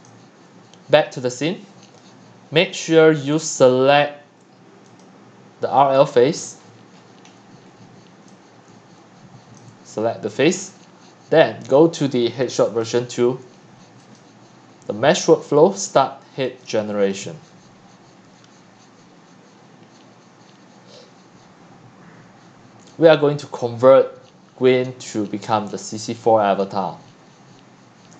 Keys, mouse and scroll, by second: 0.1 click, 2.0-3.3 scroll down 4, 3.5-5.9 drag, 5.9-6.4 scroll down 10, 6.4-7.5 scroll, 8.1 scroll, 8.5-9.2 typing, 9.5 click, 10.2 click, 10.7 click, 11.1-12.4 scroll up 1, 12.4-12.7 scroll up 1, 13.8 middle click, 16.5 middle click, 23.9-26.2 drag.